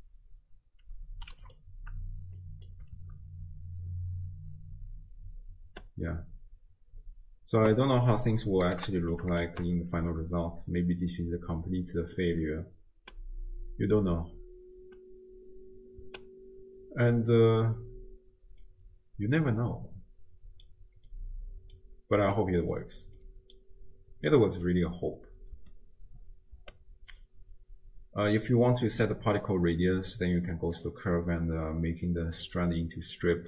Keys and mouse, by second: 2.4 click, 3.0 shift+space, 5.9 space, 8.1-9.1 drag, 9.6 shift+space, 13.2 space, 14.3 space, 14.9 space, 16.2 space, 17.5 space, 18.7-20.7 drag, 21.2 middle click, 21.2 click, 21.4 middle click, 21.5 click, 21.6 middle click, 21.7 click, 23.2 middle click, 23.2 click, 23.4 middle click, 24.3 click, 25.8 space, 26.9 space, 28.3 click, 30.8 click, 32.5 click.